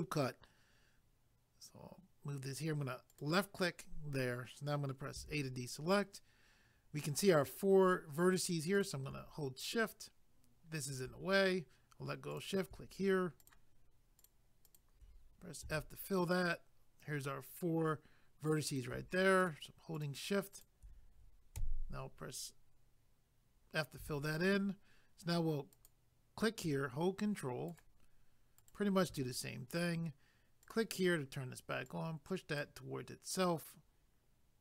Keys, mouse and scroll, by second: 3.1 click, 5.2 a, 8.8 click, 12.3 click, 13.4 shift+click, 15.6 f, 18.7 click, 19.4 shift+click, 20.1 shift+double click, 20.5 shift+click, 21.6 f, 25.7 click, 27.7 ctrl+right click, 30.6 click, 31.8 click.